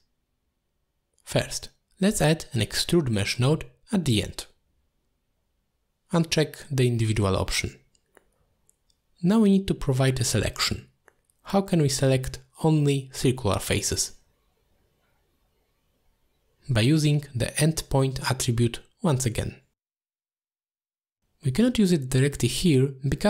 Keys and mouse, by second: 1.6 click, 2.0 g, 3.1 click, 3.3 g, 4.0 click, 4.9-6.8 drag, 7.8 click, 8.5 alt+shift+click, 9.3 click, 12.7-13.7 drag, 14.8 middle drag, 17.5 middle drag, 19.6 middle click, 21.3 click, 22.2 click, 22.8 click.